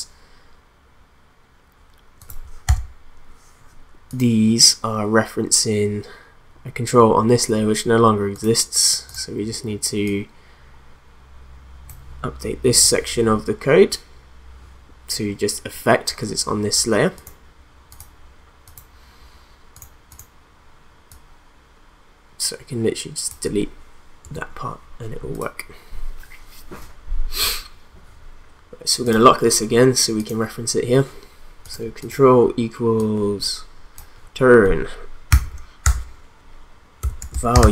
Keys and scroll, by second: 2.6 u, 24.2 BackSpace, 35.3 ;, 35.8 Return, 36.8-37.7 typing.